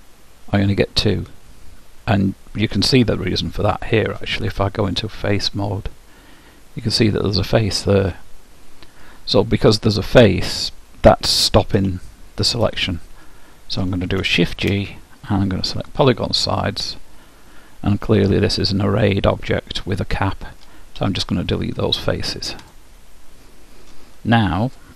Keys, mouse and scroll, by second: 5.3-9.0 drag, 7.8-9.6 middle drag, 12.0-15.1 middle drag, 14.4 shift+g, 17.0-19.0 middle drag, 21.0 Delete, 24.8-24.9 drag.